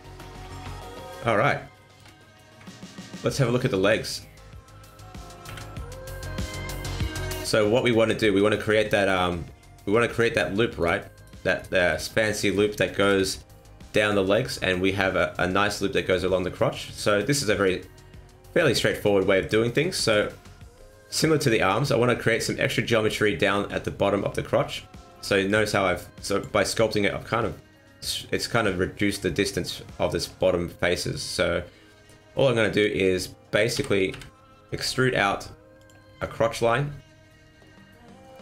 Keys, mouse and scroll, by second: 0.1 middle click, 0.9 scroll up 1, 1.2 middle click, 1.8 shift+middle click, 2.1 middle click, 2.4 Tab, 2.8-3.2 scroll down 3, 3.0 middle click, 5.4 KP_1, 6.3-6.6 scroll up 3, 6.6 shift+middle click, 7.2 scroll up 2, 7.7 scroll down 2, 8.0 middle click, 8.3-8.7 scroll up 1, 8.7 middle click, 10.1 click, 10.8 right click, 11.1 shift+right click, 11.5 right click, 11.8 shift+right click, 12.2 scroll down 2, 12.3 middle click, 13.0 KP_1, 16.5 scroll up 2, 16.8 shift+middle click, 19.0 middle click, 20.1 KP_1, 21.9 scroll up 2, 25.4 click, 33.7 e, 36.0 scroll down 3, 36.2 middle click.